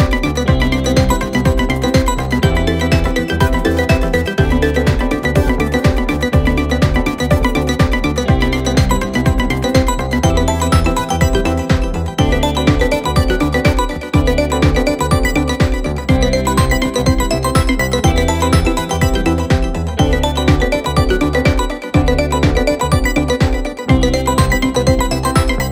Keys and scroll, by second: 8.6 ctrl+F1, 14.1 ], 17.4 ], 21.4 4, 24.5 3, 25.0 ].